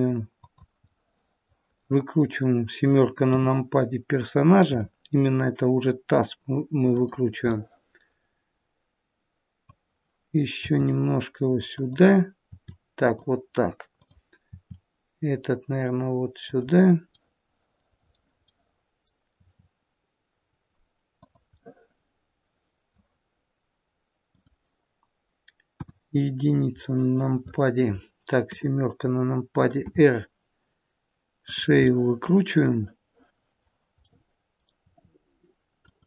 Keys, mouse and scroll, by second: 1.8 middle click, 3.2 KP_7, 4.6 r, 7.5 middle click, 12.4 r, 13.9 click, 14.4 r, 17.1 middle click, 18.4 middle click, 19.3 r, 22.1 middle click, 24.1 click, 25.7 KP_1, 26.7 middle click, 28.3 KP_7, 29.7 r, 31.9 middle click, 34.0 middle click, 34.8 r.